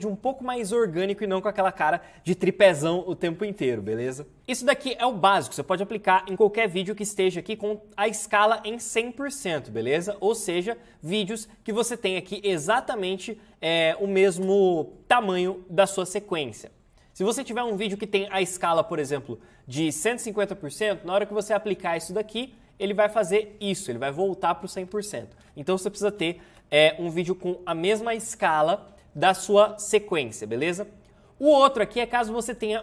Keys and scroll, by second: 4.4 space, 12.7 Return, 25.3 ctrl+z, 26.4 ctrl+z.